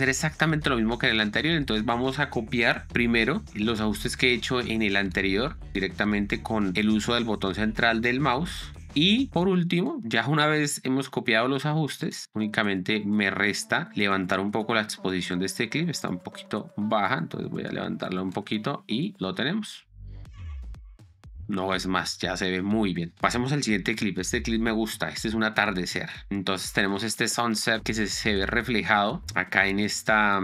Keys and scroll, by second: 19.6 space, 23.1 space, 24.0 Down, 25.1 Down.